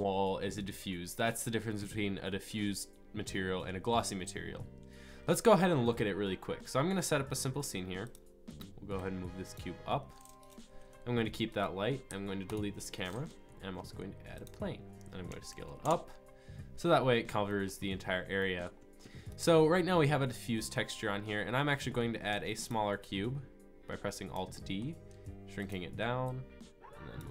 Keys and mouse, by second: 5.0-8.0 middle drag, 8.0-9.2 drag, 10.1-10.4 drag, 11.3 middle click, 12.1 Delete, 13.6 shift+a, 15.3 s, 20.9-22.3 middle drag, 22.3 alt+d, 24.6 middle drag, 24.8-25.1 middle drag, 25.1 s, 26.3 click, 26.4-27.2 drag.